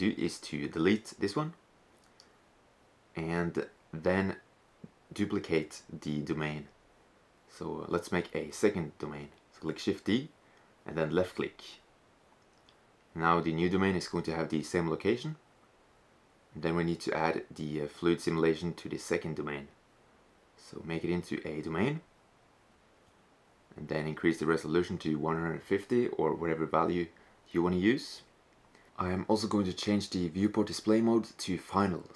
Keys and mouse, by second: 1.3-3.4 drag, 8.6 shift+d, 17.3-20.2 drag, 23.0-24.7 drag, 28.3-30.0 drag.